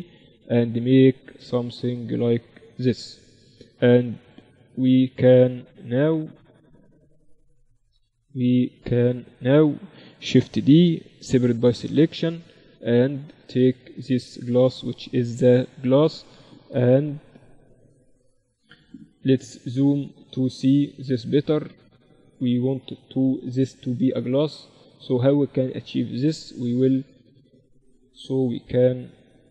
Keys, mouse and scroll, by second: 4.3-5.7 middle drag, 8.6-11.1 middle drag, 10.7 shift+d, 11.4 p, 12.2 Tab, 13.2 middle click, 14.5-16.0 drag, 14.5-16.4 right drag, 16.4 middle click, 17.0 KP_Divide, 19.4 shift+b, 20.9-23.0 right drag, 21.5 z, 23.5 KP_Divide, 24.5 Tab, 26.7 ctrl+r.